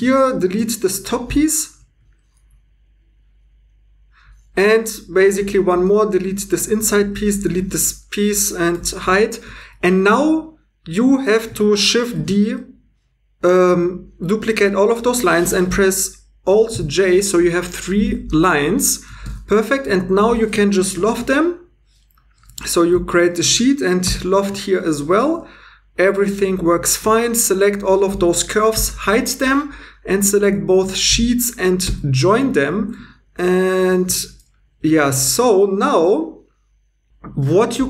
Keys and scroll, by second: 0.0 Tab, 0.4 x, 4.2 2, 5.3 c, 6.7 Tab, 7.5 Tab, 8.7 h, 9.6 2, 12.2 shift+d, 16.7 alt+j, 18.0 Tab, 19.2 2, 20.8 l, 22.3 2, 24.1 l, 26.5 2, 28.7 h, 32.1 j, 32.6 2, 34.1 super+z.